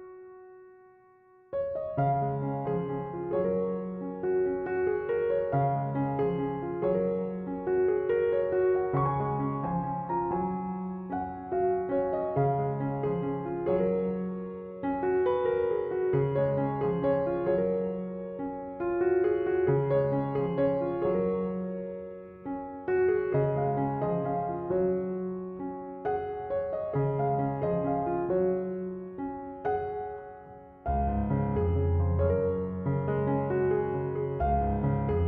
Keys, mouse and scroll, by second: 1.5-4.5 middle drag, 6.5 Tab, 7.0-10.0 middle drag, 12.7 Tab, 13.1-16.1 shift+middle drag, 16.1-19.7 drag, 20.0-23.0 middle drag, 25.7 click, 28.5-29.7 drag, 29.7-30.0 scroll down 2, 31.7-34.7 drag.